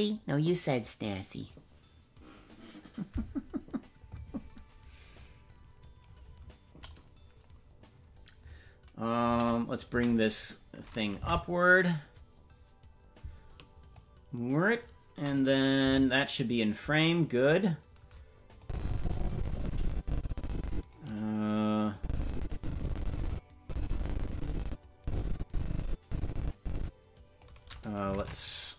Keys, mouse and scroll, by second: 9.2 KP_0, 9.9 KP_0, 11.2 Right, 13.9-15.3 drag, 15.8 KP_0, 18.6-20.9 drag, 21.9-27.4 drag, 28.1 ctrl+Tab.